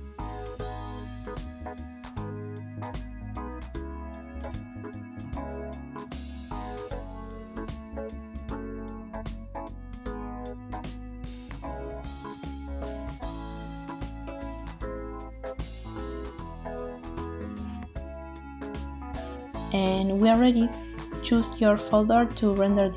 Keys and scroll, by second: 16.1 n, 18.2 space, 22.6-22.9 typing.